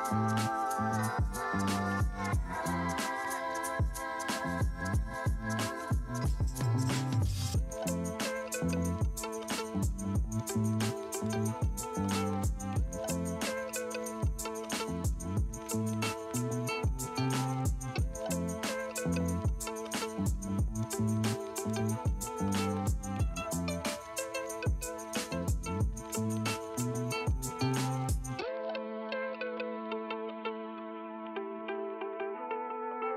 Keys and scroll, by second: 13.3 ], 21.4 space, 25.3 space, 26.2 space, 27.5 ], 31.9 space.